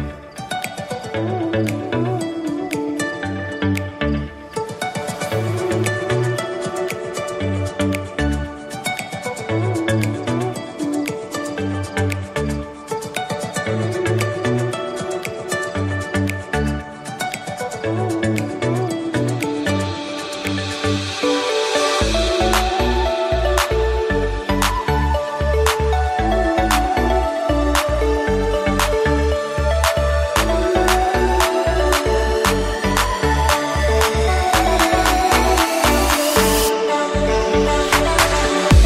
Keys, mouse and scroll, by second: 2.0 middle click, 2.6 shift+a, 6.2-10.2 drag, 10.4-11.4 drag, 11.4 KP_1, 13.2-14.0 shift+middle drag, 14.0 r, 17.7 g, 19.5 Tab, 21.2 click, 21.5-22.7 middle drag, 22.7 click, 23.2 click, 24.8-26.0 middle drag, 26.0-28.5 drag, 28.5 KP_3, 30.5-31.5 drag, 33.5 Tab, 34.1-35.2 middle drag, 35.2 g, 37.1-38.3 middle drag, 38.3 KP_3.